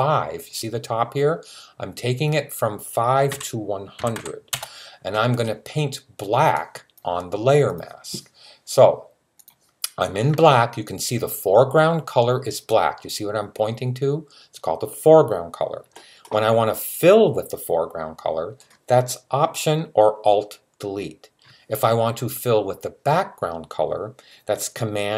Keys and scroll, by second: 3.1-4.0 typing.